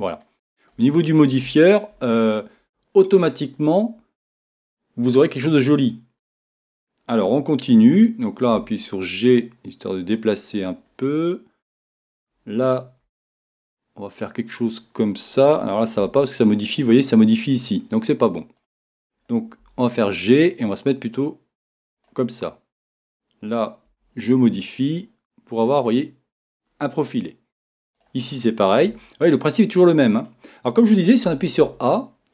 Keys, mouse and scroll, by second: 8.5 g, 10.7 click, 12.2 middle click, 13.0 right click, 13.0 g, 16.4-18.9 middle drag, 18.9-21.1 right drag, 19.6 g, 22.1 click, 23.7-25.4 right drag, 23.9 g, 26.5 click, 28.0-30.3 right drag, 28.9 g, 30.3 click, 31.3 a, 31.6 a.